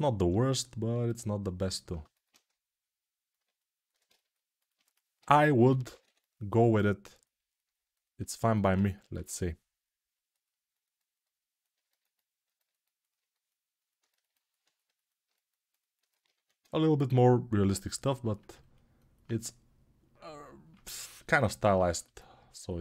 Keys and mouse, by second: 22.5-22.8 right drag.